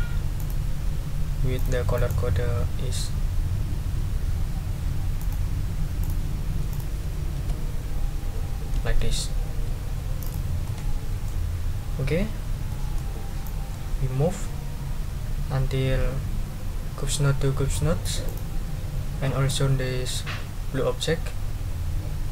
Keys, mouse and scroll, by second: 0.4 click, 1.5 click, 1.9 right click, 5.2 click, 6.0 click, 6.7 click, 7.3 ctrl+a, 8.7 ctrl+v, 10.2 click, 10.6 click, 12.7 click, 13.4-17.9 drag, 18.2 click, 19.5-22.3 drag.